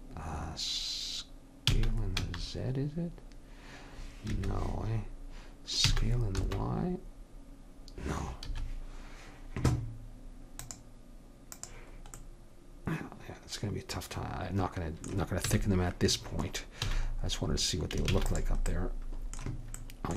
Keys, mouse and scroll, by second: 1.7 s, 5.8 s, 10.6-12.3 drag, 12.3-13.4 middle drag, 15.5 a, 16.9 a, 18.2 ctrl+s.